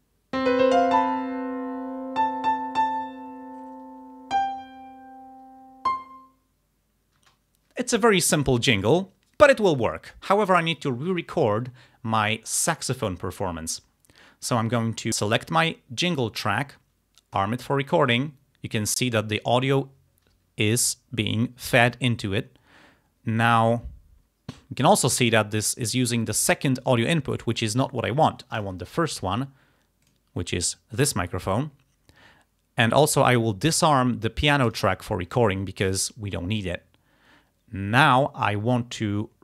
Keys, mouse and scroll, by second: 7.2 space, 15.1 click, 17.4 click, 28.6 click, 30.1 click, 34.7 click.